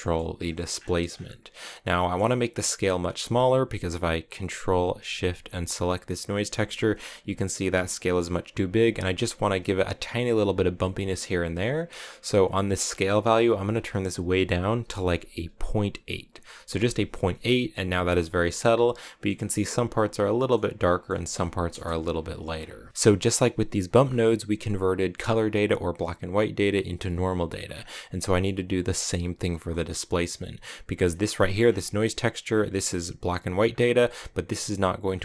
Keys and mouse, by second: 2.0 middle click, 3.0 middle click, 5.7 ctrl+shift+click, 12.9-17.0 drag, 18.0-19.1 middle drag, 20.1 middle click, 20.7 middle click, 21.6 KP_0, 29.5 middle click, 31.1 middle click, 32.5-34.0 drag.